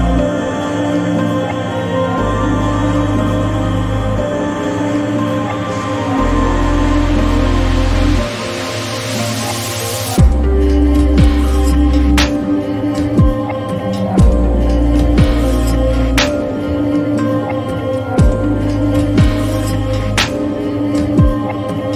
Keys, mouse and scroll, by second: 0.2 right click, 0.2 click, 3.9 click, 10.6 click, 13.3 Down, 14.4 Right, 15.4 Down, 18.8 click, 19.1 click, 21.0 click.